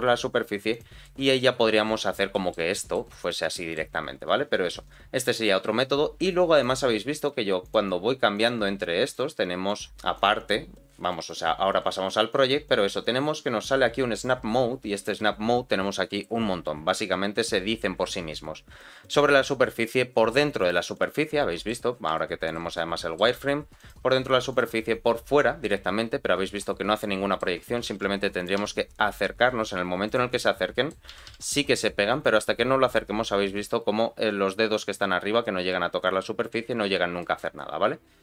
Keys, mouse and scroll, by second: 0.3-0.7 scroll up 2, 0.7 click, 1.0-2.1 middle drag, 2.3 shift+middle click, 2.7 middle click, 3.2 click, 3.5 shift+middle click, 6.5-7.7 drag, 8.3 click, 9.7 click, 11.2-12.5 drag, 14.9-20.7 drag, 21.0 middle click, 21.8 scroll up 2, 22.1 shift+middle click, 22.7 middle click, 23.8 click, 25.4 scroll down 3, 25.7-27.4 middle drag, 27.8 g, 30.3 middle click, 31.1 g, 36.8-37.1 scroll up 2, 37.2 shift+middle click, 37.5-38.2 scroll down 2.